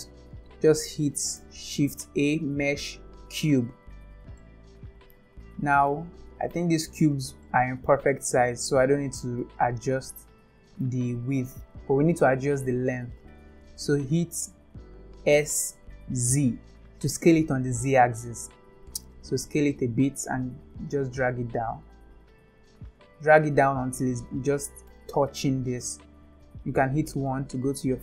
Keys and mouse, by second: 1.4 shift+a, 4.4-5.1 middle drag, 5.9-6.5 middle drag, 7.4-7.9 shift+middle drag, 8.2-8.7 middle drag, 9.4-10.8 middle drag, 15.4 s, 20.9-23.4 drag, 24.6 shift+middle drag, 27.1 KP_1.